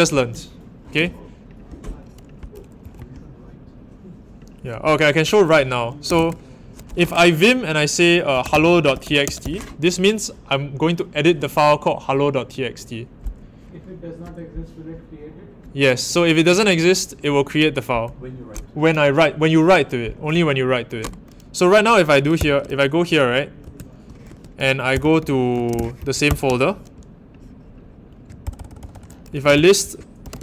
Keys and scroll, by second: 2.8 ⋮, 5.8-6.6 typing, 8.0-9.9 typing, 22.3 Return, 23.6 super+n, 24.3-26.2 typing, 26.2 Return, 28.4 super+=, 28.5 super+=, 29.2-30.4 typing.